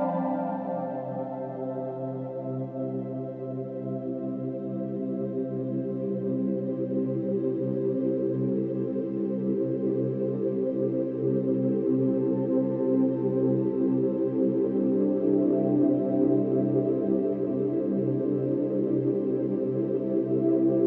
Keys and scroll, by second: 2.8 ctrl+shift+n, 5.5 l, 6.0 g, 18.5 b.